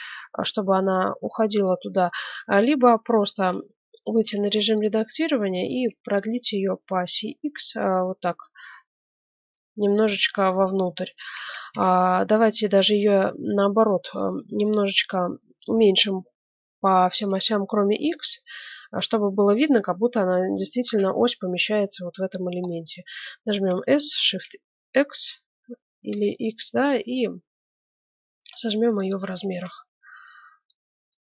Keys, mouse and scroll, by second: 1.2-3.4 middle drag, 3.4 Tab, 4.3 ctrl+Tab, 5.1-6.5 right drag, 7.5 click, 8.6-10.4 middle drag, 11.4 a, 11.7 a, 13.5-15.4 middle drag, 23.4 s, 29.3 Tab, 30.0-31.2 middle drag.